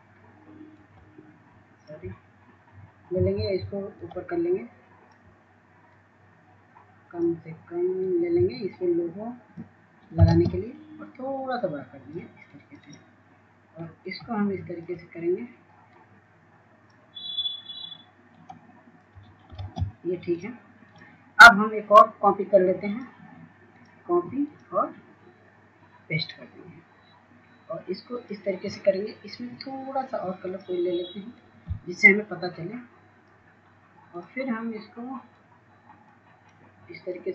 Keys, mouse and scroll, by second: 12.4-19.4 drag, 20.3-37.3 drag.